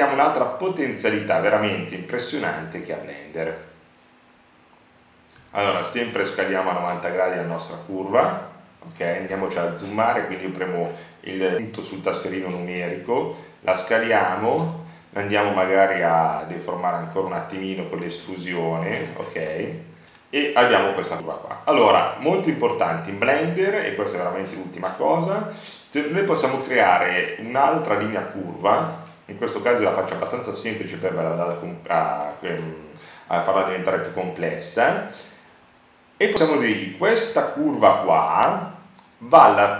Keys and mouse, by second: 1.4 Tab, 2.4 e, 5.7 Tab, 8.1 shift+a, 15.6-17.7 middle drag, 30.1-32.5 middle drag, 32.5-35.1 drag, 36.3-39.2 drag.